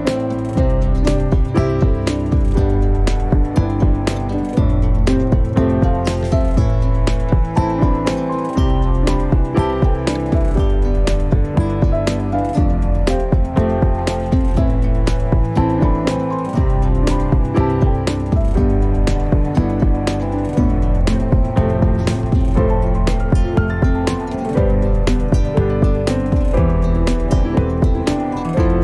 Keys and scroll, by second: 4.5 r, 6.8 4, 7.3 5, 9.0 ,, 9.8 8, 10.2 0, 11.0 Return, 11.8 space, 15.7 p, 16.8 5, 17.5 Return, 18.4 space, 20.8 q, 22.7 9, 22.9 0, 23.3 Return, 24.5 m.